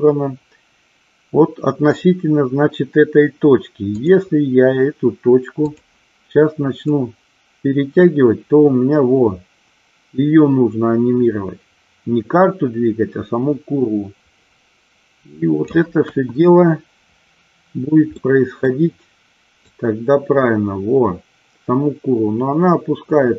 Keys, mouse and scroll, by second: 4.1 click, 5.8 click, 7.0-15.8 drag, 16.1 KP_1, 18.2 scroll up 1, 18.4 middle click, 19.9-23.3 drag.